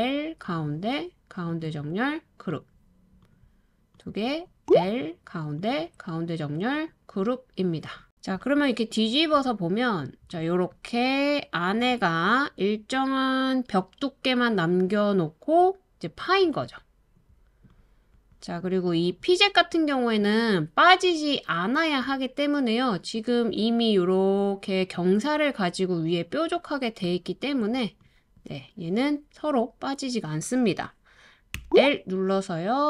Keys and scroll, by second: 4.6 typing, 12.9 typing, 31.5 typing.